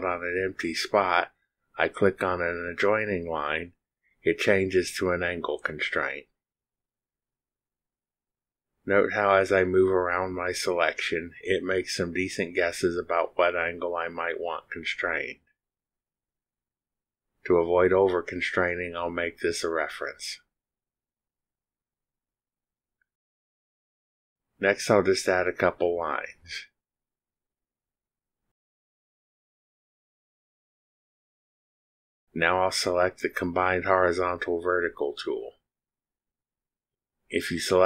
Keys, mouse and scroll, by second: 3.5 ctrl+click, 20.0 click, 22.0 click, 23.9 click, 24.3 click, 26.8 click, 28.3 click, 29.7 click, 31.5 click, 31.9 click, 34.2 click, 36.2 click.